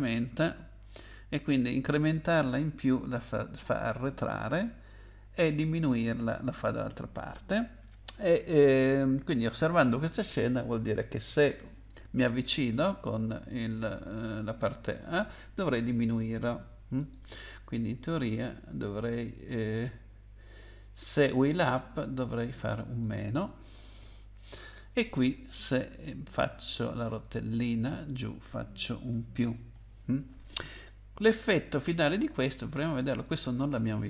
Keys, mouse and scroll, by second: 17.0 click, 22.8 click, 23.7 BackSpace, 24.0 -, 27.2 click, 28.4 BackSpace, 33.7 click.